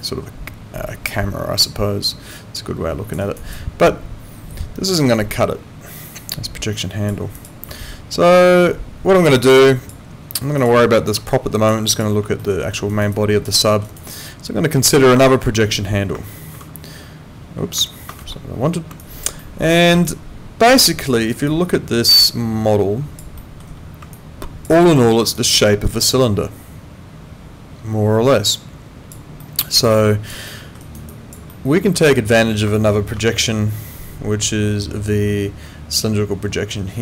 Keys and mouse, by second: 0.0 alt+click, 3.2 alt+right click, 3.5 alt+click, 7.3 click, 7.8 alt+middle click, 9.4 alt+click, 10.6 click, 11.3 alt+click, 12.4 alt+middle click, 12.9 alt+right click, 13.1 alt+click, 13.6 alt+middle click, 13.8 alt+right click, 14.1 alt+click, 15.2 alt+middle click, 16.5 ctrl+3, 18.2 Escape, 19.0 alt+click, 19.4 alt+middle click, 20.1 alt+click, 21.5 alt+click, 23.4 alt+middle click, 24.1 alt+click, 24.9 alt+middle click, 25.3 alt+click, 29.4 alt+middle click, 29.9 alt+click, 30.5 alt+middle click, 30.8 alt+right click, 31.1 alt+click, 31.5 alt+middle click, 33.0 ctrl+4.